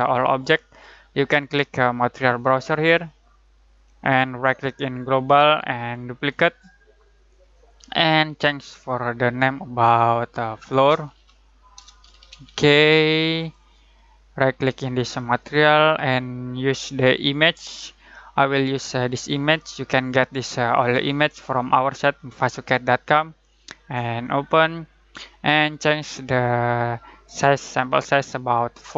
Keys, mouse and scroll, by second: 4.9 right click, 6.1 click, 10.4-12.8 typing, 13.3 click, 24.2-28.9 drag.